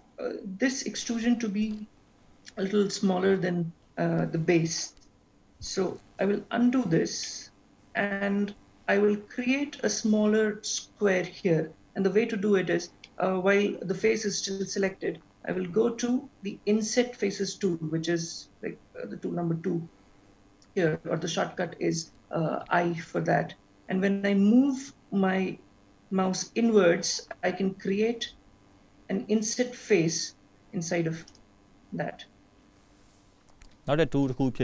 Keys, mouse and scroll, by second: 6.2 ctrl+z, 7.2 middle click, 13.0 middle click, 20.6 click, 22.6 i.